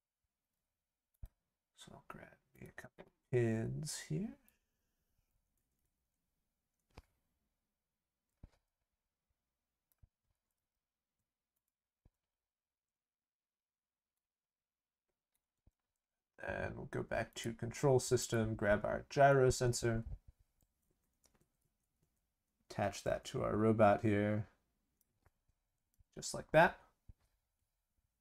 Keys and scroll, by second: 10.3 ctrl+c, 10.5 ctrl+v.